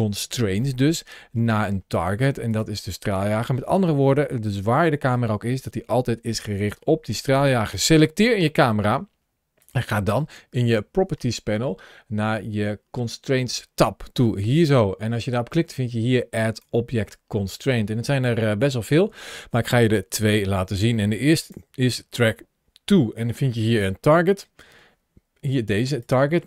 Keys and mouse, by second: 0.5-1.8 middle drag, 4.3 click, 7.0 click, 9.4 click, 10.5 ctrl+shift+a, 17.3-21.3 drag.